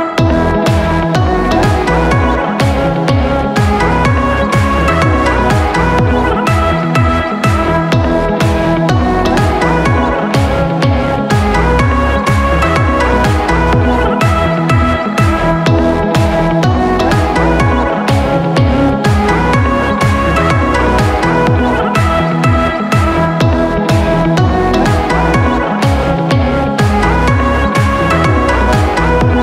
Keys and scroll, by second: 2.1 p, 5.9-7.4 typing, 8.7 Escape, 8.9 Escape, 14.3 c, 19.1 typing, 19.2 Return, 20.8-21.2 typing, 21.5 Return, 23.8 |.